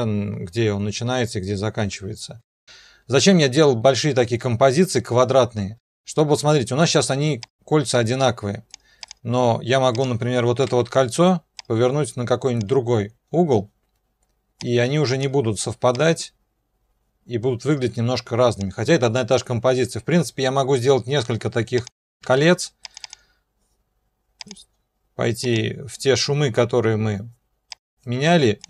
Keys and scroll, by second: 2.4 0, 10.7 r, 22.2 ctrl+d.